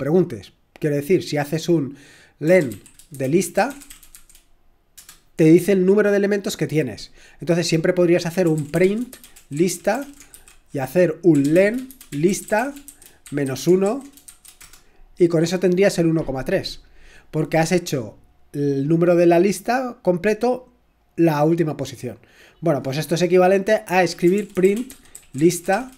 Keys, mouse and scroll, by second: 2.4-5.0 typing, 8.2-14.3 typing, 14.6 Return, 18.8-24.5 drag, 24.5-25.9 typing.